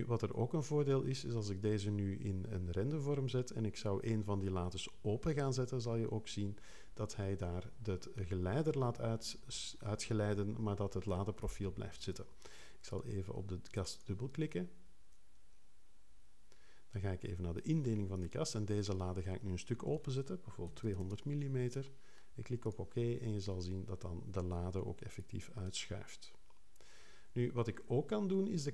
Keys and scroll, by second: 20.4-21.3 typing.